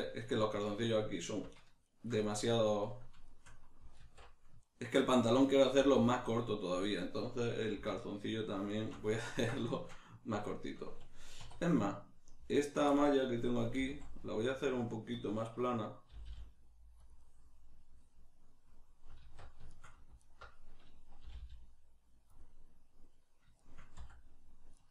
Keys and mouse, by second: 1.8 alt+shift+right click, 2.3-8.0 middle drag, 4.0 alt+q, 8.0 alt+shift+right click, 8.7 alt+shift+right click, 9.3-12.5 ctrl+middle drag, 11.4 2, 12.5 alt+right click, 12.9-16.2 shift+middle drag, 13.8 s, 16.2 g, 17.1 click, 17.2-20.2 middle drag, 19.2 alt+q, 20.2 alt+right click, 21.2 g, 22.4 click, 23.6-24.9 shift+middle drag, 24.0 s.